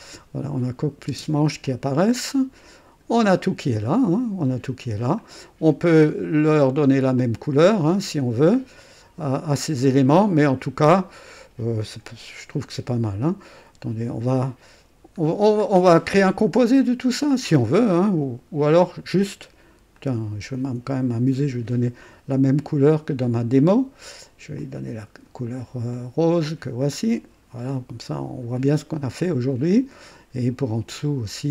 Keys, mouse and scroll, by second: 1.0 typing, 1.6 click, 2.2 click, 3.1-4.3 typing, 3.3-4.6 drag, 5.2 click, 6.4 right click, 7.2 click, 8.5 click, 10.0 scroll up 1, 10.2 right click, 11.8-13.9 typing, 15.3 scroll down 1, 15.6 scroll up 1, 16.1-17.5 right drag, 18.2-18.7 scroll up 1, 18.7 right click, 19.9 click, 21.1 ctrl+d, 24.6 click, 25.9 click, 27.1 click, 28.5 click, 29.2 click, 29.7 click, 31.0 click.